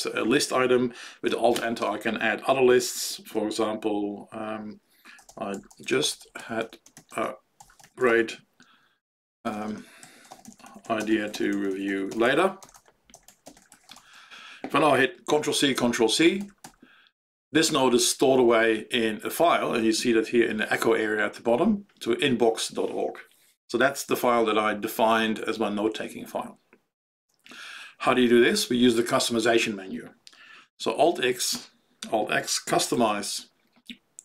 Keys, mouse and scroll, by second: 1.5 alt+Return, 4.9-14.7 typing, 16.6 ctrl+c, 31.0 alt+x, 32.4-33.6 typing.